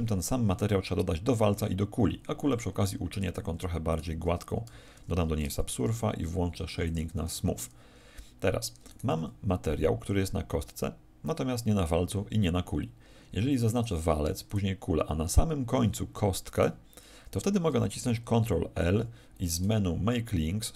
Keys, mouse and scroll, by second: 3.1 Escape, 3.8 right click, 4.9 ctrl+2, 5.7 t, 6.8 click, 7.2 t, 8.8 right click, 9.1 z, 13.6 right click, 14.4 shift+right click, 18.9 ctrl+l.